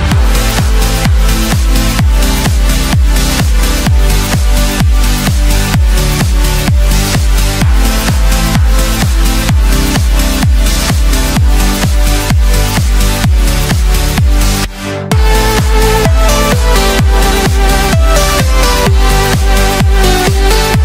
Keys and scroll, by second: 1.0 ctrl+shift+i, 2.4 ctrl+shift+a.